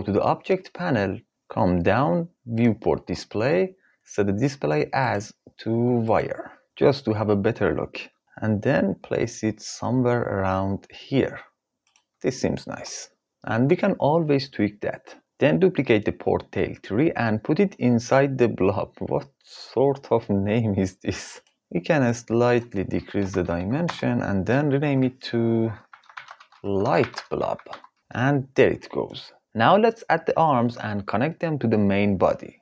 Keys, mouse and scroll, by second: 2.1 click, 4.6-5.7 drag, 8.5 g, 11.4 click, 15.3 shift+d, 18.7 click, 21.7-23.6 drag, 24.4 F2, 32.3 ctrl+s.